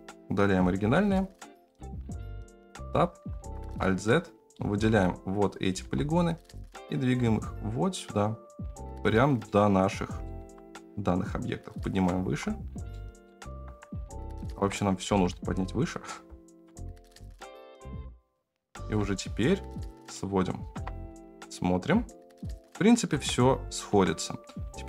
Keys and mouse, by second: 0.8 x, 2.6 Tab, 3.6 alt+z, 4.6 click, 5.7 g, 9.4 middle click, 10.3 g, 12.2 alt+z, 12.9 middle click, 13.4 alt+z, 14.5 Tab, 15.0 g, 16.6 KP_7, 17.4 KP_1, 17.5 g, 17.8 shift+middle click, 17.9 Tab, 18.0 Tab, 18.1 click, 18.7 g, 20.7 KP_0, 23.1 Tab, 23.8 Tab, 24.4 middle click.